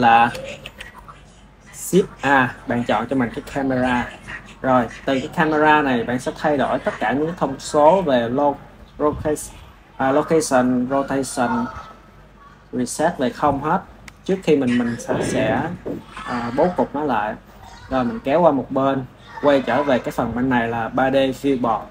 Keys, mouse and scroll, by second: 0.5 shift+a, 5.4 click, 11.4-17.6 right drag, 17.6-21.9 drag.